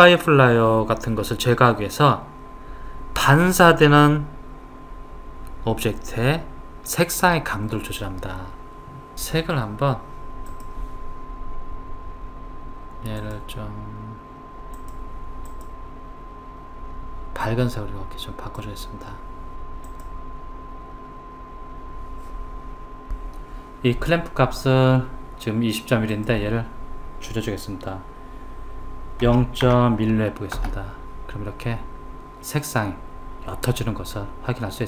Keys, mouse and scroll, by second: 10.5 click, 13.2 click, 26.5 click.